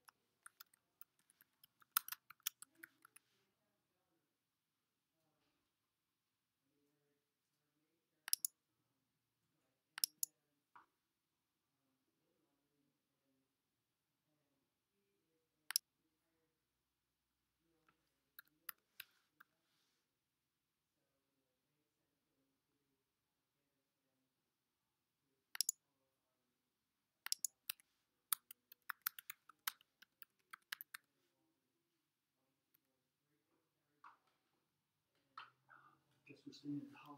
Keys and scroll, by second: 0.0-3.6 typing, 18.2-19.9 typing, 27.3-31.5 typing, 32.8 •.